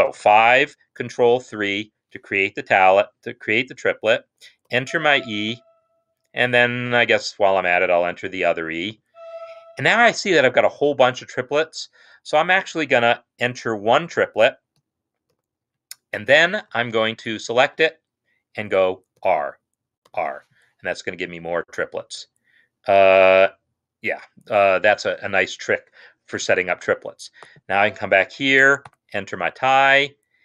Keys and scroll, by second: 0.0 5, 1.2 ctrl+3, 4.5 e, 6.9 Right, 7.4 Right, 8.7-9.5 typing, 14.3 5, 15.2 ctrl+3, 16.1 Escape, 16.9 shift+Right, 17.5 shift+Right, 19.0 r, 20.1 r, 28.9 shift+=.